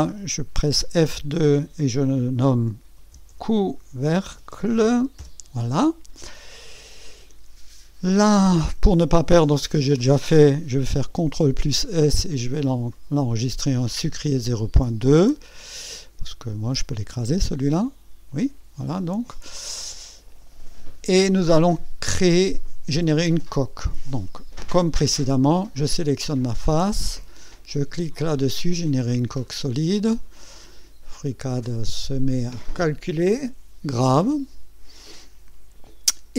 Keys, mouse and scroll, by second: 0.8 F2, 2.7-5.4 typing, 7.0 click, 8.1 right click, 11.3 ctrl+s, 12.9 click, 17.4 click, 18.4 click, 20.6 click, 25.6 click, 29.4 click.